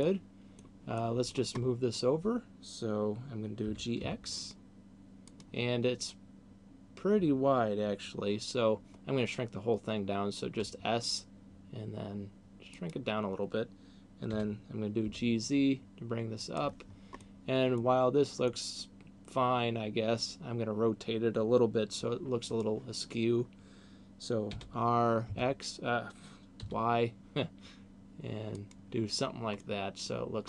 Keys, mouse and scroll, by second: 0.2 middle click, 1.2 middle click, 1.7-2.4 scroll down 3, 3.4 g, 5.4 click, 10.4 s, 12.9 click, 14.2 g, 16.4 click, 17.2 middle click, 18.4 middle click, 24.7 r, 28.4 click, 29.4 middle click.